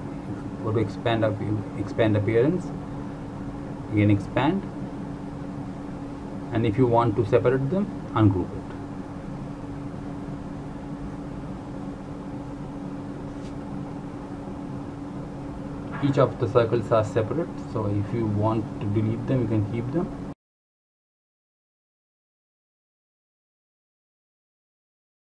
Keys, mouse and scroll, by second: 2.5 right click, 3.9 click, 7.4 right click, 8.5 click, 9.5 right click, 10.5 click.